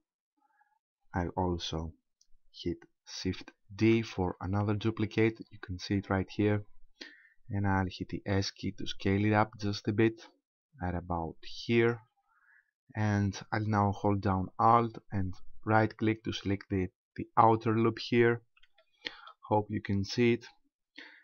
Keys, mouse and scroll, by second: 3.8 shift+d, 6.1 right click, 8.2 s, 11.9 click, 15.7 alt+right click, 16.9-17.3 scroll up 2, 18.8 shift+middle click, 19.4-19.7 scroll up 3.